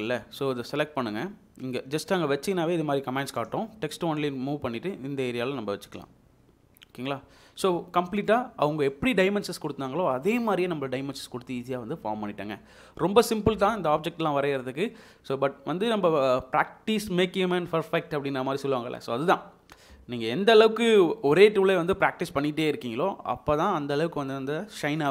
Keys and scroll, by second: 7.3 Escape.